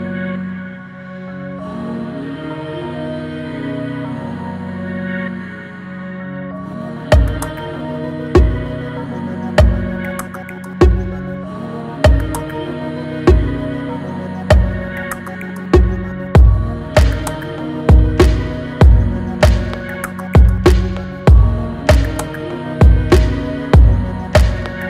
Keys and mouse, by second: 0.6-24.8 drag.